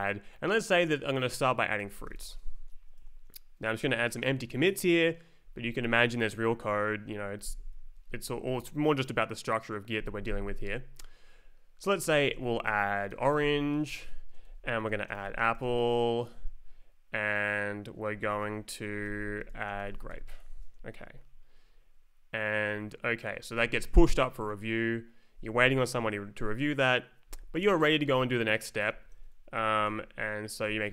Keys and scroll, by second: 1.6-2.7 typing, 3.0 Right, 7.4 shift+e, 11.6-16.0 typing, 18.8-20.6 typing, 22.7 Left, 23.3 Right, 29.1 Left, 30.6-30.9 typing.